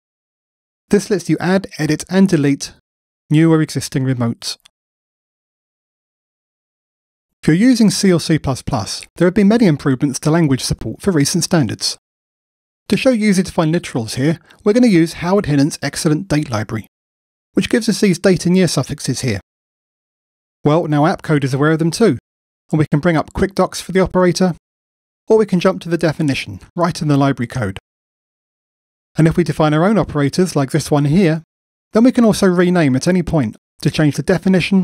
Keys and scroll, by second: 0.6 shift+super+a, 21.8 F1, 26.1 super+b, 31.7 shift+F6.